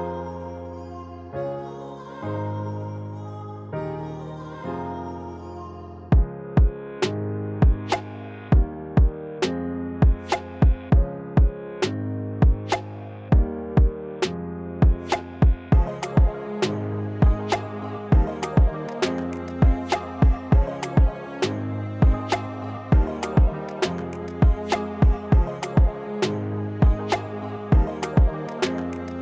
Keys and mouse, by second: 4.4 KP_1, 5.7 s, 7.5 s, 7.6-9.2 drag, 7.6 s, 8.1 g, 12.2 click, 14.6 s, 16.7 click, 17.4 KP_1, 21.4 click, 23.0 g, 25.7-26.2 right drag, 26.2 middle click, 26.9 middle click, 27.4 click, 27.9 g.